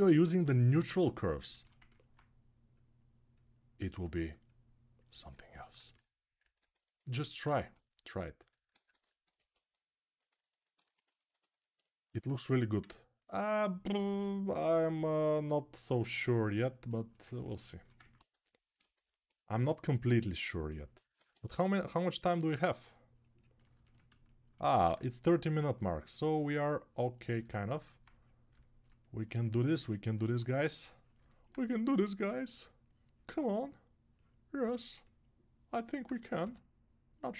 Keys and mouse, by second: 6.2 alt+q, 7.2 alt+1, 8.5 ctrl+z, 8.7 ctrl+z, 9.0 1, 16.8-29.0 ctrl+alt+right drag, 18.1-19.4 typing, 21.0 alt+q, 29.0-31.4 ctrl+alt+drag, 31.4-37.3 ctrl+right drag, 36.2 g.